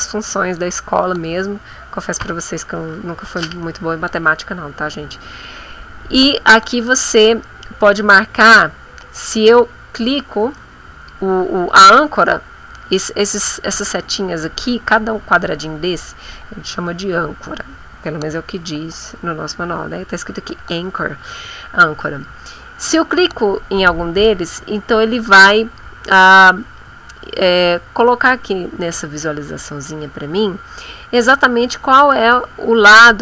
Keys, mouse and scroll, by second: 8.4 click, 10.4 click.